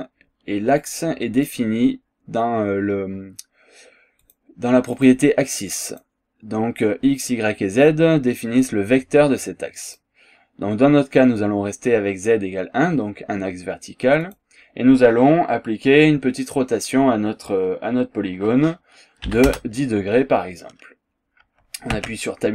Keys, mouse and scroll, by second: 0.8 click, 1.3 click, 4.3 click, 4.9 click, 5.9 click, 9.9 click, 14.3 click, 19.3 KP_1, 19.5 KP_0, 21.9 Tab.